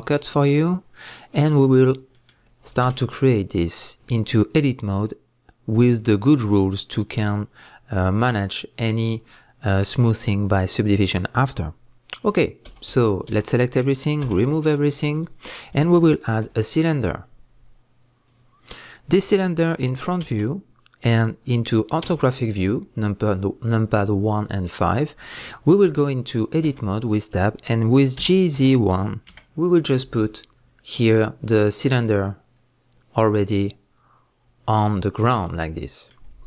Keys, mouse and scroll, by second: 0.0 click, 0.9-2.1 drag, 1.5 scroll down 1, 1.8 scroll up 1, 2.1-30.0 middle drag, 2.8 a, 16.3 shift+a, 20.2 KP_1, 24.0 scroll up 1, 26.6 Tab, 30.0 click, 35.5-36.4 middle drag.